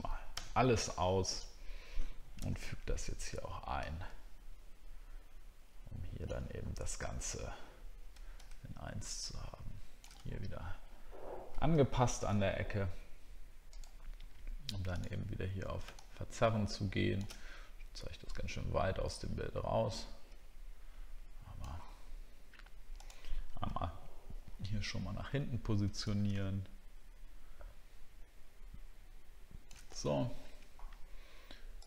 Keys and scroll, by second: 6.6 alt+scroll up 1, 23.7 alt+scroll up 1, 30.1 alt+scroll down 1.